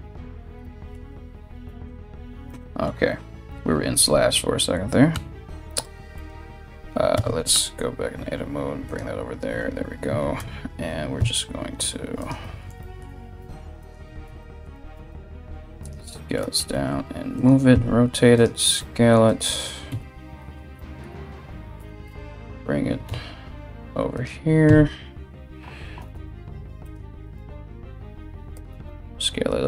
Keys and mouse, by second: 1.2 /, 3.6 KP_1, 4.7 g, 6.7 Tab, 7.1 g, 9.9 Tab, 10.8 s, 13.0 s, 14.5 g, 16.2 r, 17.3 s, 18.4 g, 19.5 KP_3, 21.4 g, 24.2 KP_1, 25.6 r, 26.9 g, 28.3 s.